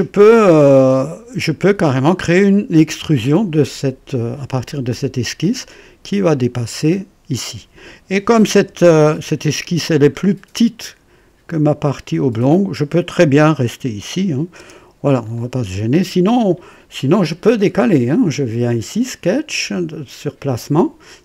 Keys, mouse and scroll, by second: 0.6 click, 3.6 click, 5.4-6.9 drag, 7.7 click, 8.3 typing, 9.0-9.3 scroll up 1, 9.6 right click, 10.2 scroll up 1, 13.6-14.1 scroll down 2, 14.5 KP_0, 15.1-15.4 scroll down 1, 15.7 right click, 17.2 click.